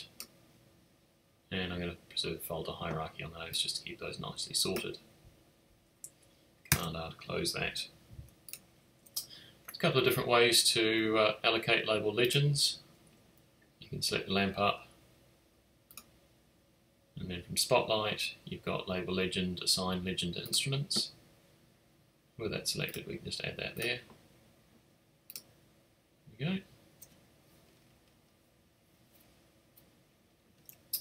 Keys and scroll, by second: 6.7 super+r.